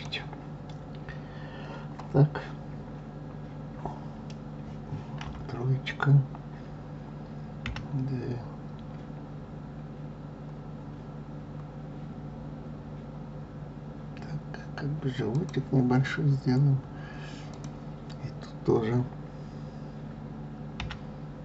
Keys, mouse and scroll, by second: 5.2 KP_3, 7.6 g, 17.5 click.